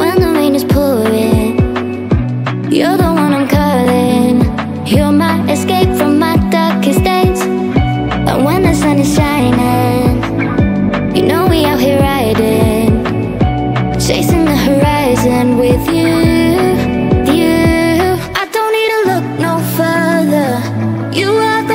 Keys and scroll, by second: 12.5 space, 21.1 Right.